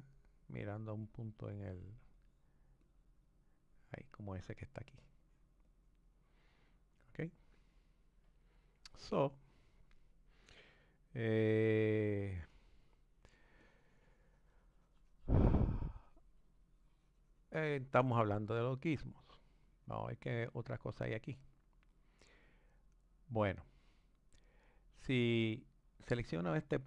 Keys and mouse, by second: 1.6-8.7 drag, 9.5 click, 12.6 click, 13.6-18.2 drag, 18.8 click, 21.9 click.